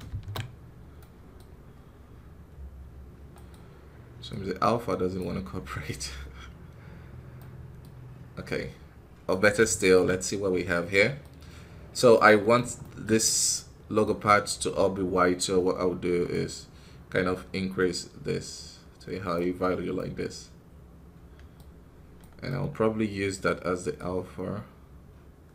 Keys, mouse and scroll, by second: 0.0 ctrl+space, 0.9-2.4 middle drag, 2.4-3.3 scroll up 1, 4.2 click, 7.3 middle click, 8.0-8.4 scroll up 1, 9.2 right click, 9.7 ctrl+shift+click, 10.4-10.8 scroll down 3, 10.8 middle click, 11.2-11.6 scroll up 1, 11.6-12.0 scroll down 3, 12.0-16.2 middle drag, 16.2-19.5 drag, 19.5 scroll down 2, 19.8-21.4 middle drag, 21.4 scroll up 2, 25.4-25.5 drag.